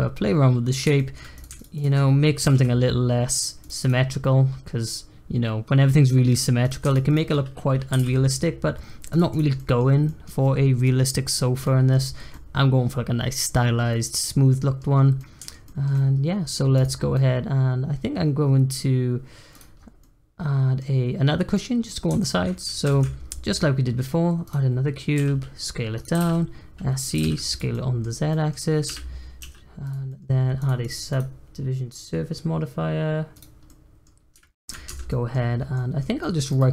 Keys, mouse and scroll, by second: 1.3 click, 1.5 shift+drag, 1.7 shift+click, 2.3 g, 3.8 click, 4.0-6.6 middle drag, 6.8 shift+click, 7.0 shift+click, 7.9 g, 9.3 click, 9.5-11.9 middle drag, 11.9-12.3 scroll down 2, 12.3-13.5 middle drag, 13.5-13.9 scroll up 1, 13.9-15.1 middle drag, 15.1 scroll up 1, 15.2-16.7 middle drag, 16.7 click, 17.1-19.5 middle drag, 19.5 click, 19.7 scroll down 3, 19.9-20.9 middle drag, 20.9-21.5 scroll up 1, 21.5-22.2 middle drag, 22.2-22.8 shift+right drag, 22.8 shift+a, 25.1 s, 26.1 s, 27.1 g, 27.7 middle click, 28.0 scroll up 1, 28.3 middle click, 28.8 g, 30.0-30.5 middle drag, 30.5 click, 30.8 click, 31.1-33.6 drag, 33.6-34.2 middle drag, 34.2 scroll up 2, 34.4-34.8 shift+middle drag, 34.8 Tab, 35.1 middle click, 35.4 scroll up 1, 35.7 middle click, 36.4-36.7 right drag.